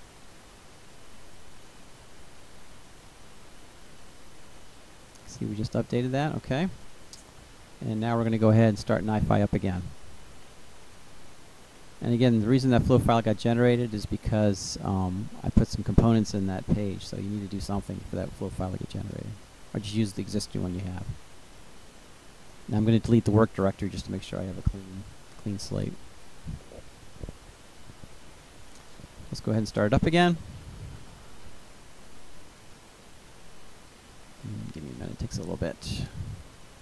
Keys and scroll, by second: 18.2 Delete, 36.7 Return.